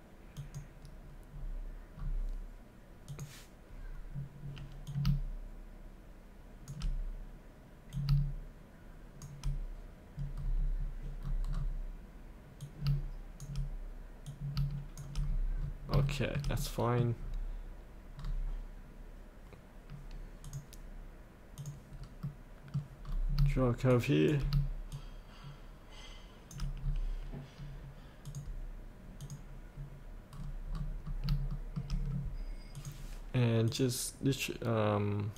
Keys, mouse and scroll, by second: 1.3 scroll up 1, 1.9 scroll down 1, 3.1-6.7 drag, 7.9 click, 10.4-11.2 scroll up 1, 11.2-11.5 scroll down 1, 12.7 click, 14.3 click, 15.2-15.6 scroll up 1, 16.0 shift+middle click, 16.5 scroll up 1, 16.6 middle click, 17.2-18.2 scroll up 1, 18.2-20.5 scroll down 1, 20.5 click, 22.2 middle click, 23.0-23.4 scroll down 1, 24.9-26.5 shift+drag, 26.8-28.2 scroll up 1, 28.2 click, 30.3-31.3 scroll down 1, 31.5 shift+middle click, 32.8-35.3 drag.